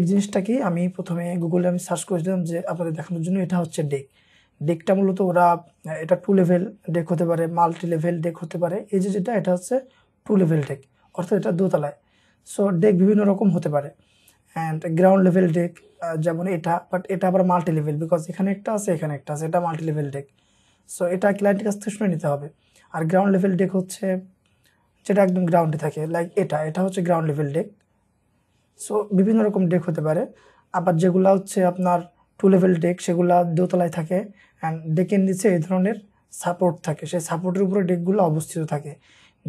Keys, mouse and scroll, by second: 0.2 middle click, 2.2-3.3 scroll up 1, 22.7-23.7 scroll up 1, 24.2-24.7 scroll down 1.